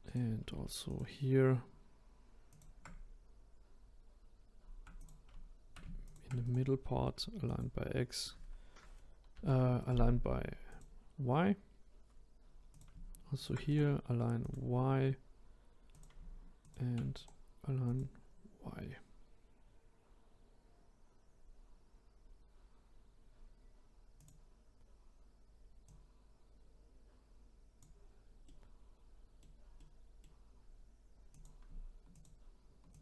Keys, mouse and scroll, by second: 0.0 click, 0.8 shift+click, 2.5 shift+click, 5.0-6.1 drag, 6.4 right click, 9.3 ctrl+z, 9.8-12.7 right drag, 12.7 click, 13.3 shift+click, 13.7-15.9 right drag, 15.9 click, 16.6 shift+click, 17.1-20.2 right drag, 21.8-22.7 scroll down 1, 22.7 scroll up 1, 23.3-23.6 scroll up 1, 24.1 click, 25.8 click, 28.4-31.3 middle drag, 31.3 click, 32.1 shift+click, 32.9 shift+click.